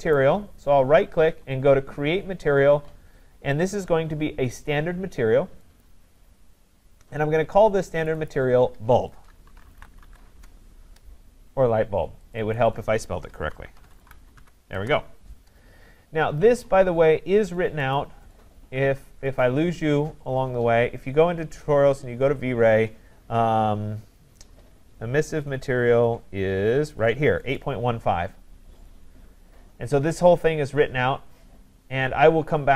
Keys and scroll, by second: 10.3 Return.